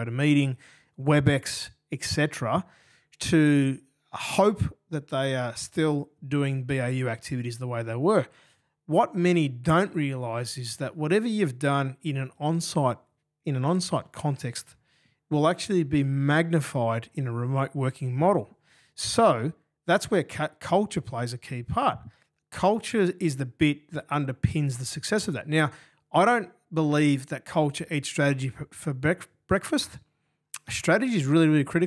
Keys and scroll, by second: 7.8 g, 8.9 g, 10.0 d, 12.0 g, 13.9 d, 16.6 BackSpace, 18.1 Delete, 25.7 super+[, 25.8 super+[, 26.0 super+[.